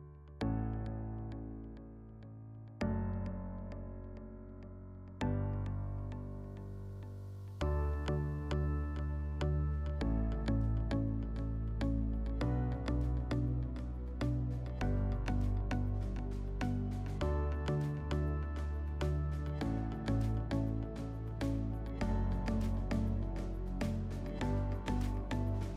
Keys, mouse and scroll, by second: 17.1 click, 17.3 click, 18.2 typing, 18.6 Return, 21.4 3, 21.9 Return, 24.7 click, 24.9 click, 25.5 typing.